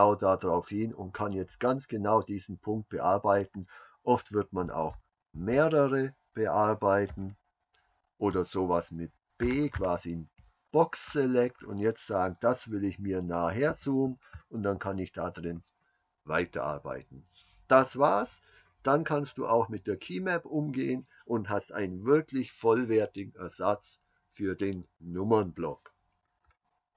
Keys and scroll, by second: 4.7 KP_Subtract, 5.0-9.4 KP_Subtract, 9.4 b, 13.7 super+y.